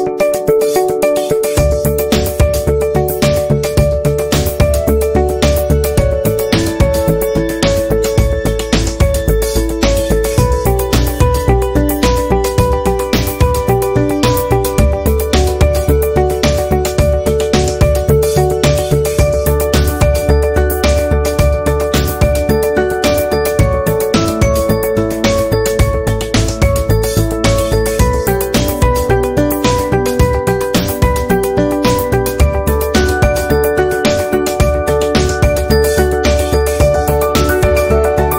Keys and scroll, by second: 3.7 ctrl+g, 5.8 ctrl+c, 6.3 ctrl+f, 10.6 ctrl+z, 12.9 p, 19.5 ctrl+z, 22.7 ctrl+z, 25.7 ctrl+z, 29.5 v, 32.6 p, 33.8 ctrl+z.